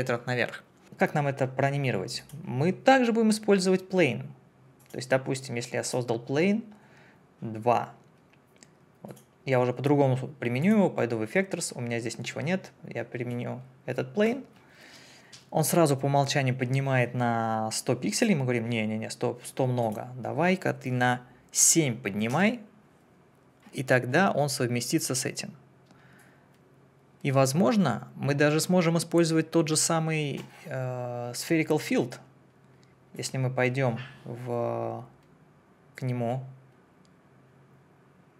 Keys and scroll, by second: 21.6 7, 22.3 Return.